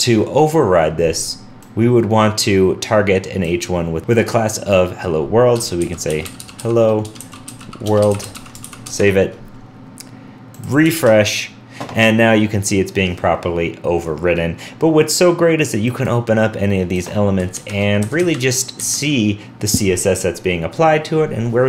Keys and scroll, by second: 8.6 super+s, 8.9 super+Tab, 10.9 super+r.